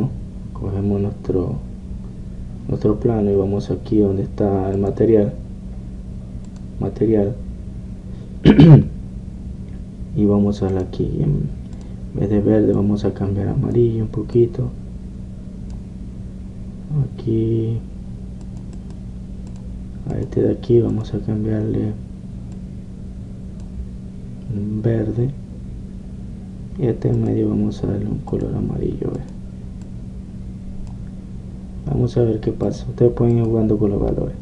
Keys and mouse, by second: 0.0 Escape, 5.8-9.5 drag, 11.8-23.7 drag, 19.8-21.6 right drag, 23.8 click, 24.0-28.2 middle drag, 28.2-32.2 drag, 32.2-33.7 middle drag, 33.7 click.